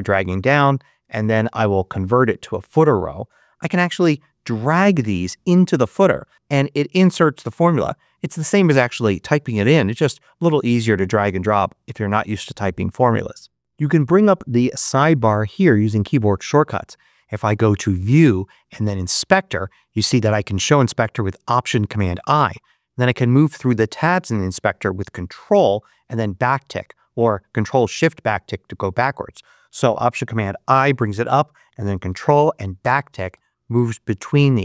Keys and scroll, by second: 30.5 alt+super+i, 32.7 ctrl+`.